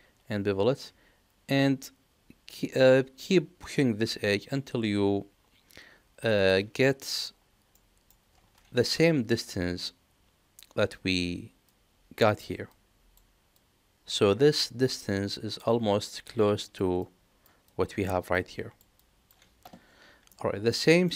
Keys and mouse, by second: 7.7 middle click, 20.2 middle click, 20.8 shift+middle click.